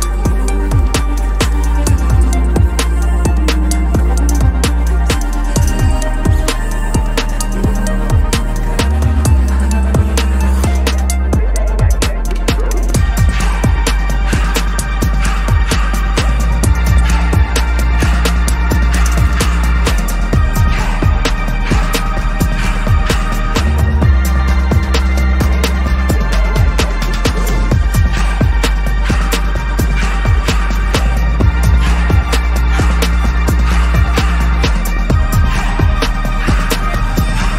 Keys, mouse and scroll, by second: 1.2 shift+click, 1.8 ctrl+g, 2.4 double click, 3.2-4.2 typing, 4.7 Return, 6.1 double click, 8.7 ctrl+=, 8.9 ctrl+=, 9.2 space, 10.1 ctrl+=, 10.5 space, 11.7 ctrl+=, 12.5 space, 13.5 ctrl+=, 14.7 p, 17.6 alt+click, 17.7 double click, 18.3 right click, 19.2 Return, 22.2-22.5 typing, 23.4 alt+click, 26.5 double click, 30.7 double click, 30.8 ctrl+-, 31.1 ctrl+-, 31.3 ctrl+-, 31.6 ctrl+-, 31.8 ctrl+-, 33.3 ctrl+=, 33.5 ctrl+=, 33.7 space, 34.4 ctrl+=, 34.7 ctrl+=, 34.9 space, 35.8 p.